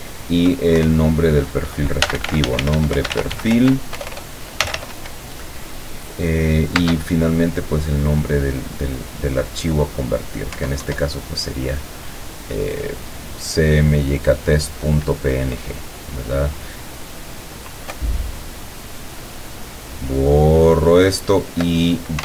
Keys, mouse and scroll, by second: 0.8 KP_Divide, 1.8-5.3 typing, 6.8 space, 10.6 Down, 18.0 BackSpace.